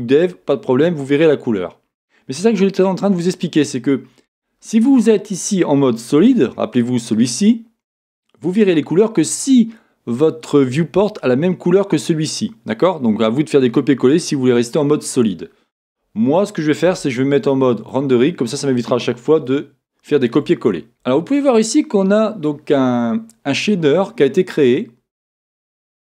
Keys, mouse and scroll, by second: 6.2 z, 16.8 z, 19.5-26.1 shift+middle drag, 23.2-26.1 scroll up 2.